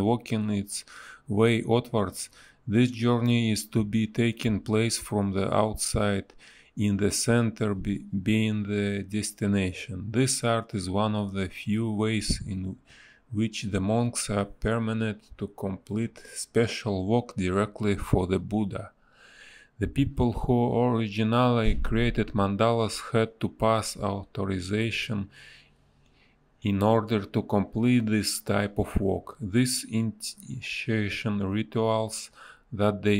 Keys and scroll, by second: 2.8 a, 4.2 space, 6.2 space, 7.5 space, 9.9 space, 11.2 space, 11.7 b, 17.7 a, 18.2 Delete, 18.6 b, 22.3 space, 22.6 a, 28.1 space, 29.0 space, 31.2 space, 32.2 b.